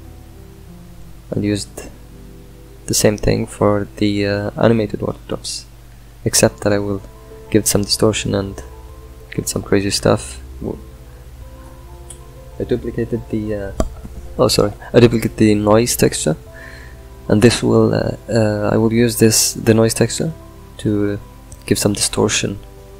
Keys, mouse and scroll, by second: 5.8 ctrl+shift+click, 6.0-11.3 middle drag, 11.3 click, 12.0 shift+d, 18.8-20.3 drag, 21.3-22.9 drag.